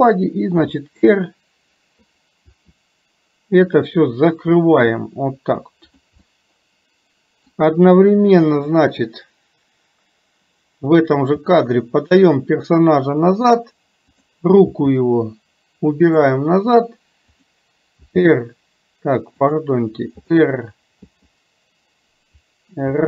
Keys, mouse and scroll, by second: 6.2-7.6 middle drag, 8.7 click.